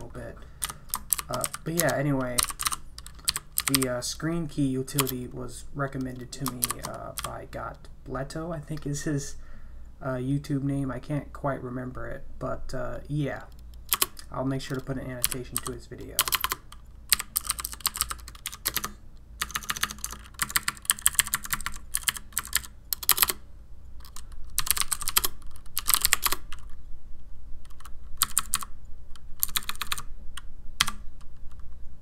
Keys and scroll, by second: 0.6 Escape, 1.1-7.7 typing, 5.0 Return, 13.9 Return, 15.0-19.0 typing, 19.4 Tab, 19.5 Tab, 19.7 Tab, 19.8 Tab, 20.0-20.9 Tab, 20.4 Right, 20.6 Right, 20.7 Right, 20.9 Left, 21.1 Left, 21.2 Left, 21.3 Right, 21.5 Right, 21.6 Right, 21.7-23.1 typing, 23.1 Return, 23.2 Return, 24.3-26.5 typing, 28.2 Page_Down, 28.4 Page_Down, 28.5 Page_Down, 29.4 Page_Up, 29.6 Page_Up, 29.7 Page_Up, 29.8 Page_Up, 29.9 Page_Up, 30.8 q.